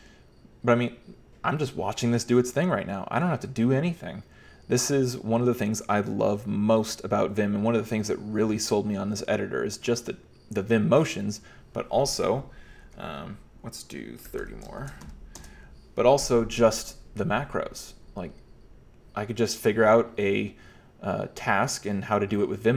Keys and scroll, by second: 14.1-16.1 typing.